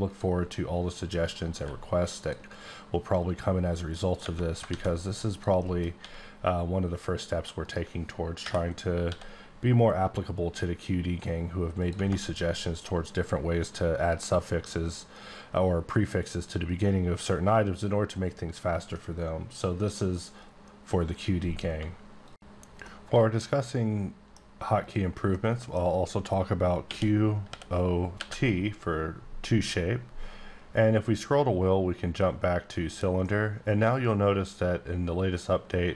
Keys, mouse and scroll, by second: 0.1 click, 1.2 right click, 1.5 q, 2.1 click, 3.2 click, 3.6 scroll down 1, 3.9 middle click, 4.4 scroll down 2, 4.7 a, 5.0 click, 5.5 middle click, 6.0 s, 7.6 right click, 8.4-9.1 typing, 9.6-11.8 scroll down 15, 11.8 click, 24.8 click, 25.2 middle click, 26.8-28.2 typing, 30.5 typing, 31.0-31.5 scroll down 2, 31.9-33.2 scroll down 3, 33.2 middle click.